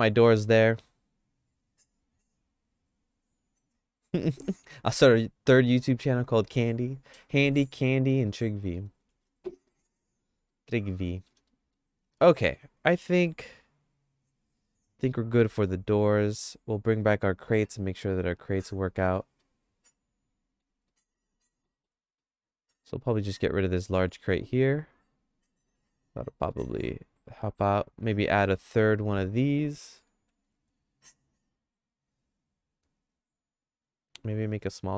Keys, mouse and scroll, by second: 0.5 middle click, 4.7 middle click, 5.2 middle click, 6.5 middle click, 7.7 middle click, 8.2 shift+middle click, 9.2 ctrl+s, 9.7 middle click, 10.5 middle click, 10.9 shift+middle click, 11.5 middle click, 12.2 middle click, 15.0 middle click, 15.7 middle click, 19.4-20.6 shift+middle drag, 20.9 middle click, 21.6 middle click, 22.2 shift+middle click, 23.2 click, 23.6 click, 24.7 x, 25.6 middle click, 26.5-27.6 shift+middle drag, 28.4 middle click, 28.9 click, 30.1 shift+d, 34.5 s.